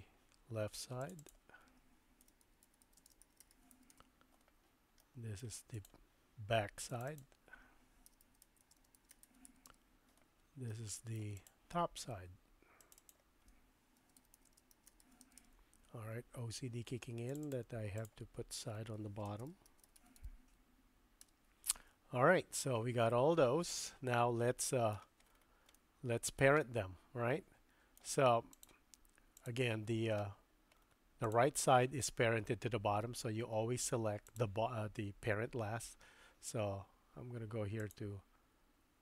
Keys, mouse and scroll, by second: 1.2-4.6 drag, 5.0 middle click, 6.9 click, 7.1-10.4 drag, 10.7 middle click, 11.4 click, 13.0-16.2 drag, 17.5-22.3 drag, 23.0-25.0 middle drag, 25.7-26.4 shift+middle drag, 26.6-28.0 middle drag, 28.5 click, 29.3 click, 31.2 click, 34.3 click, 37.8 click.